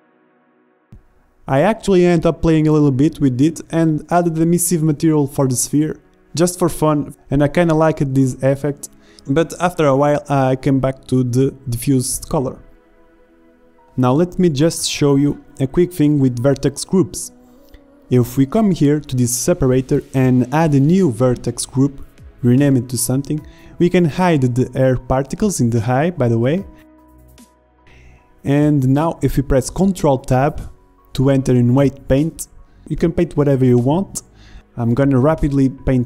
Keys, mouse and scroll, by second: 1.9 shift+z, 5.2 z, 6.4 click, 7.1 shift+a, 7.6 drag, 7.9 click, 9.8 KP_0, 14.6-15.6 drag, 16.9-18.6 drag, 18.8-19.6 drag, 19.6 BackSpace, 22.0-26.1 drag, 27.5 z, 28.0 drag, 28.2 middle click, 29.0 ctrl+Tab, 32.8-36.0 middle drag.